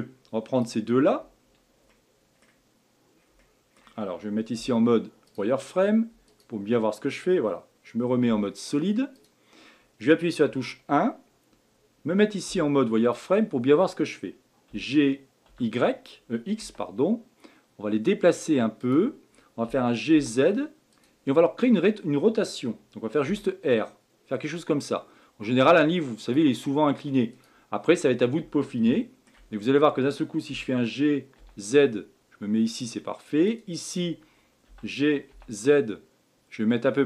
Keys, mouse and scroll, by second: 0.6 click, 1.9-4.5 middle drag, 4.5 z, 6.3 shift+click, 8.2 z, 10.4 KP_1, 12.5 z, 27.3 click, 27.8 scroll up 2, 28.9-29.5 shift+middle drag, 29.5-30.5 scroll up 3, 30.5 g, 33.4 click, 34.7 g.